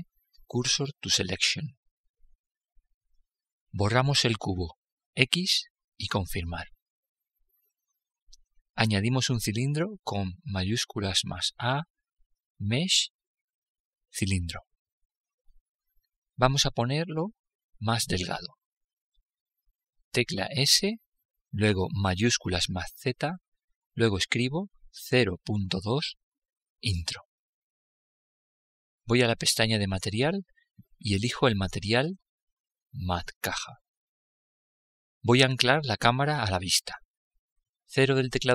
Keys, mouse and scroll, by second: 4.5 x, 9.9 shift+a, 17.1-18.8 middle drag, 19.9 s, 29.4-32.6 drag, 38.4 KP_0.